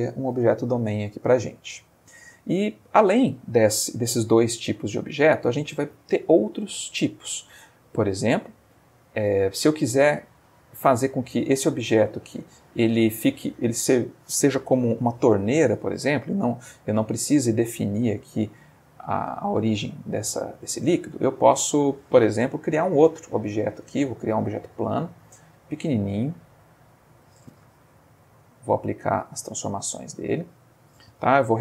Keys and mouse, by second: 4.8 Escape, 8.4 click, 9.3-10.0 middle drag, 10.2-11.6 ctrl+middle drag, 12.0 click, 19.9 click, 20.3 x, 20.6 click, 22.4 shift+a, 23.4 click, 24.3 g, 25.4 click, 25.6 s, 27.1 click, 27.8 ctrl+a, 28.4 click, 29.3-31.2 shift+middle drag, 31.5 F2.